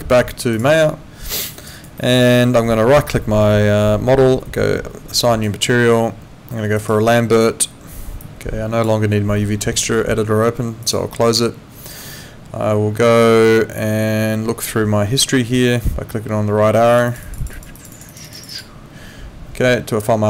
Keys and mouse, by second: 0.5 alt+click, 1.4 alt+click, 1.7 alt+right click, 2.0 alt+middle click, 2.9 right click, 6.8 click, 8.2 click, 10.8 click, 16.9 click.